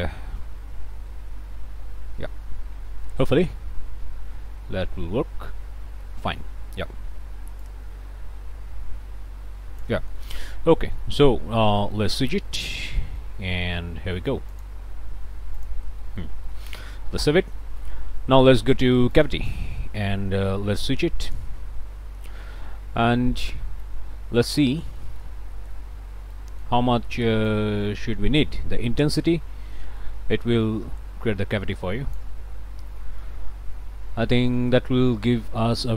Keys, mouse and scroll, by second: 3.3 scroll up 2, 6.0 middle click, 7.6-10.1 drag, 10.1 scroll up 2, 10.2 middle click, 10.5 click, 10.6 scroll down 2, 11.1 middle click, 11.5 scroll down 1, 11.8 middle click, 12.7 click, 13.2 middle click, 14.5 ctrl+shift+click, 15.6 ctrl+shift+click, 16.0 ctrl+shift+click, 16.5 ctrl+shift+click, 17.2 ctrl+s, 17.5 ctrl+click, 19.1 ctrl+shift+click, 21.2 click, 22.6 scroll up 2, 23.2 scroll up 2, 23.4 middle click, 24.1 scroll down 2, 24.9 click, 25.7 click, 26.5 click, 26.6-26.9 scroll up 2, 32.3 click, 32.5 scroll up 2, 32.8 click, 33.4 click, 33.6-34.2 scroll up 2, 34.7 click.